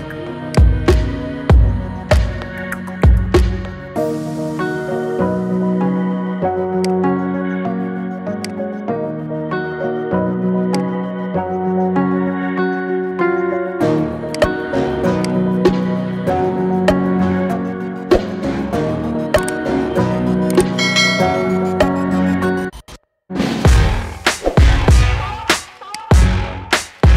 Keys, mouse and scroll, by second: 0.4 click, 1.0-2.4 middle drag, 2.4-2.8 scroll down 1, 2.8 middle click, 3.6-4.5 scroll up 1, 4.5 ctrl+z, 5.5 ctrl+z, 6.0 ctrl+z, 6.8 click, 7.4 scroll down 1, 8.3 click, 9.4 /, 10.7 click, 11.2-12.0 scroll down 2, 12.0 Tab, 12.8-14.2 middle drag, 14.2 click, 15.1 click, 16.4-17.9 ctrl+KP_Add, 18.4-18.8 scroll up 4, 18.8-19.7 middle drag, 19.7-20.1 scroll down 3, 20.1-20.6 scroll up 2, 20.6-21.5 shift+middle drag, 21.5 KP_Add, 23.3 p, 24.2 p, 24.6 Tab, 24.9-25.3 scroll down 5, 25.3-25.8 middle drag, 25.8 click.